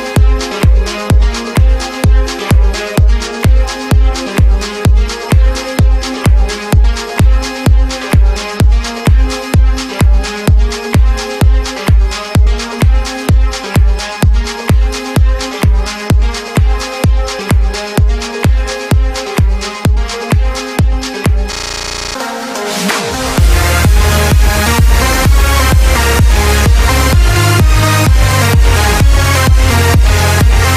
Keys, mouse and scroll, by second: 1.2 b, 5.6 b, 6.3 b, 9.0 b, 10.7 b, 16.2 b, 23.2 b, 26.1 b.